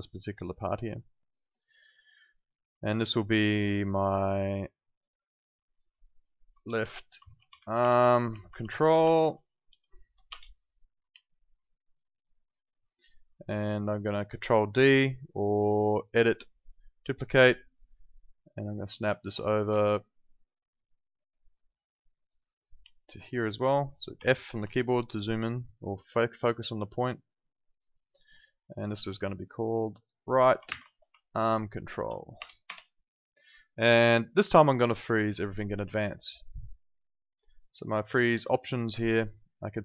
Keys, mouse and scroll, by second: 1.6 alt+right click, 2.3 alt+click, 3.5 alt+middle click, 4.5 click, 6.6-9.6 typing, 10.3 Return, 11.2 alt+middle click, 11.6 alt+right click, 12.6 alt+middle click, 13.4 alt+right click, 14.0 alt+click, 20.2 click, 22.9 alt+click, 23.4 alt+middle click, 24.1 f, 24.7 alt+click, 27.9 alt+right click, 28.9 click, 30.6 shift+r, 31.1 Right, 32.3 BackSpace, 32.6 KP_Enter, 35.4 click.